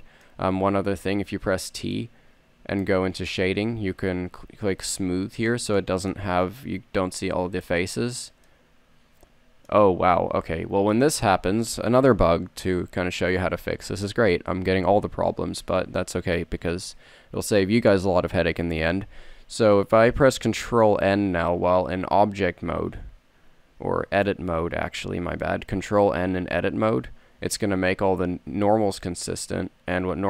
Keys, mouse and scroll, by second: 0.9 t, 23.0 ctrl+n, 25.0 Tab, 27.6 ctrl+n, 29.4 a.